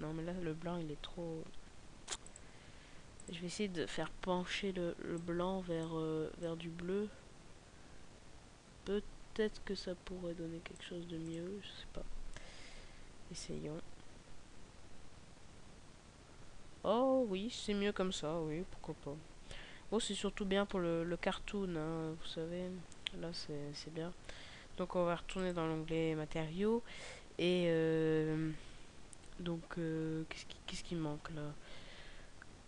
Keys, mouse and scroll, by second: 22.6 Escape, 22.6 scroll down 4, 25.2 click.